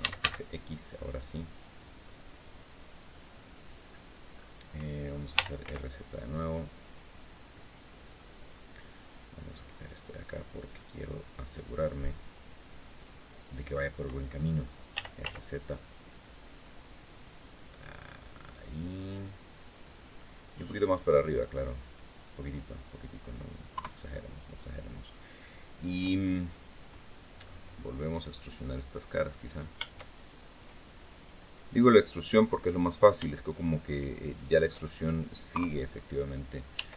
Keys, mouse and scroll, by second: 0.0 x, 3.3 click, 4.1 scroll up 1, 5.1 r, 5.4 z, 6.6 click, 7.4 middle click, 9.3 click, 9.9-11.0 drag, 11.6-13.5 drag, 14.7 r, 15.0 z, 16.1 click, 17.1-18.7 drag, 18.8 scroll down 2, 19.0-20.1 middle drag, 20.8-22.5 drag, 22.6 scroll down 1, 23.5 KP_3, 27.1-27.4 scroll up 1, 27.6 middle click, 29.1 right click, 29.9 shift+right click, 30.8 right click, 31.3 right click, 31.6-31.9 scroll up 2, 32.5 right click, 33.3 shift+right click, 34.0 shift+right click, 34.5 shift+scroll down 2, 35.3 KP_3, 36.5 e.